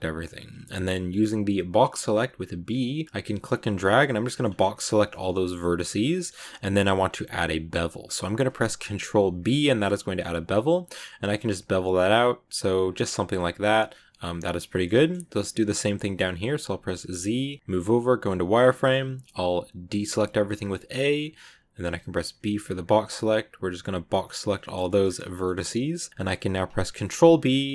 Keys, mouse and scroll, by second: 0.7 click, 2.0 b, 4.1 middle click, 4.3-5.0 scroll up 1, 5.2 middle click, 6.0 scroll up 1, 6.1-8.9 middle drag, 8.9 ctrl+b, 13.2 scroll down 2, 13.2 scroll up 1, 13.3 scroll down 1, 13.5-16.1 middle drag, 16.1 scroll up 1, 17.0 z, 18.3 scroll up 1, 18.6 middle click, 18.8-19.7 scroll down 1, 19.7 a, 24.5 shift+middle click, 24.9-25.7 shift+scroll up 3, 25.2 middle click, 25.7-26.8 middle drag, 26.8 ctrl+b.